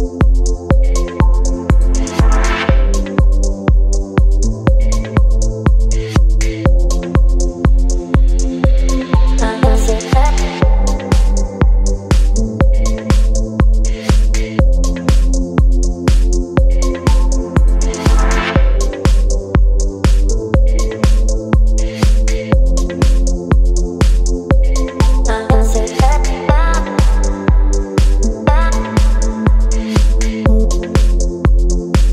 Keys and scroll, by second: 0.8 Return, 4.7 space, 5.4 c, 7.0 Return, 7.5 v, 12.2 Right, 14.7 Delete, 15.4 space, 17.0 Left, 22.1 space, 27.7 space, 29.9 Delete, 30.4 space.